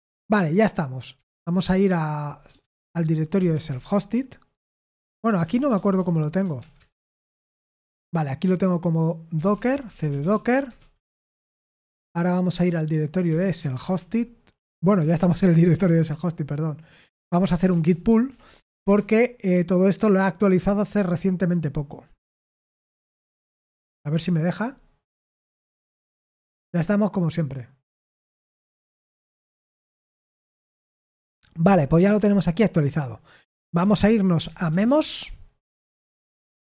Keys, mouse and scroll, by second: 5.3-7.1 typing, 9.9-11.5 typing, 15.3 BackSpace, 15.5 BackSpace, 18.4-18.9 typing, 34.7-36.6 typing.